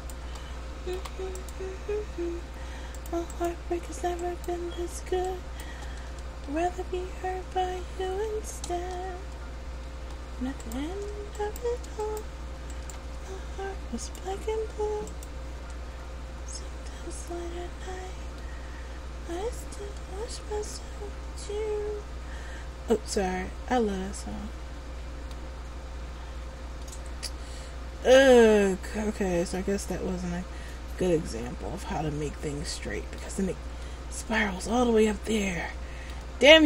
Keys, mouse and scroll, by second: 0.1 shift+right click, 1.1 p, 3.1 click, 4.4 right click, 5.4 shift+right click, 6.2 Tab, 8.8 Tab, 10.7 right click, 11.5 shift+right click, 12.2 right click, 12.9 shift+right click, 14.2 click, 15.9 Tab, 18.6 middle click, 27.0 middle click, 34.0 middle click.